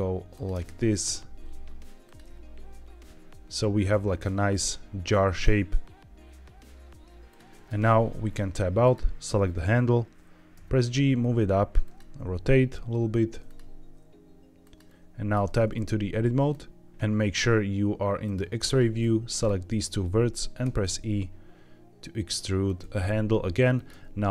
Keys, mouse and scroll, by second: 0.2 click, 0.4 e, 0.9 click, 1.0 e, 2.0 click, 2.1 e, 7.2 click, 7.6 Tab, 8.7 click, 10.5 g, 11.7 click, 11.9 e, 12.8 r, 13.4 click, 13.5 g, 14.5 click, 15.3 Tab, 16.4 click, 18.1 click, 18.9 click, 20.6 e, 22.6 click, 22.7 e, 23.6 click, 23.8 e.